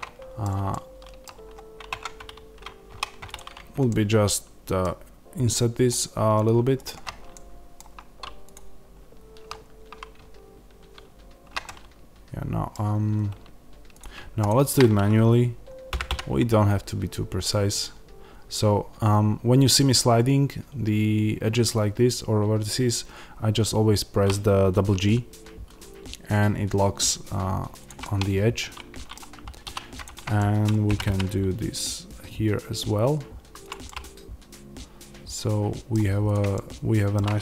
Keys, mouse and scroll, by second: 1.8 Tab, 2.8 1, 3.2 click, 3.8-6.7 middle drag, 6.7 shift+click, 7.2-8.4 middle drag, 8.4 shift+click, 11.5-13.9 middle drag, 12.7-13.9 scroll down 1, 13.9 click, 15.8 g, 27.7 click, 27.9-29.9 middle drag, 29.5 2, 29.9 click, 30.3-33.6 middle drag, 30.8 g, 33.6 click, 33.7-36.2 middle drag, 36.2 click, 36.4-37.4 middle drag.